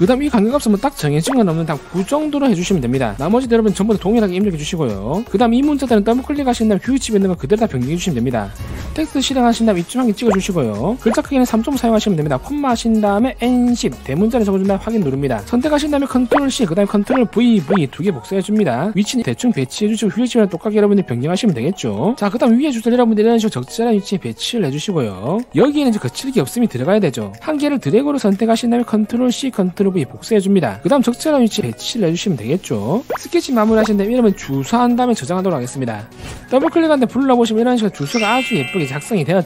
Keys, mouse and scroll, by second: 0.4 click, 1.2 click, 3.5 d, 4.2 click, 5.0 click, 8.0 click, 8.2 click, 9.6 t, 10.8 click, 13.1 space, 14.0 1, 15.8 click, 16.8 ctrl+c, 17.6 v, 18.0 v, 19.3 click, 21.0 click, 23.5-25.4 drag, 28.0 click, 30.3 ctrl+v, 30.7 click, 31.0-33.1 drag, 33.6 click, 34.6 w, 34.9 t, 36.7 click, 36.8 click.